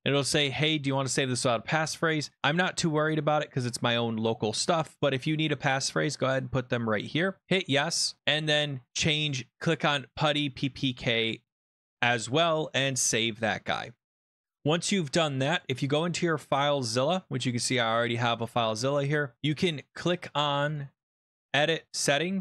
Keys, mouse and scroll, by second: 7.6-8.2 drag, 8.2-8.7 scroll down 10, 9.4 click, 9.4 scroll, 12.6 click, 15.6 click, 17.7 click, 19.7 click, 20.7 click, 21.1 click, 21.9 click.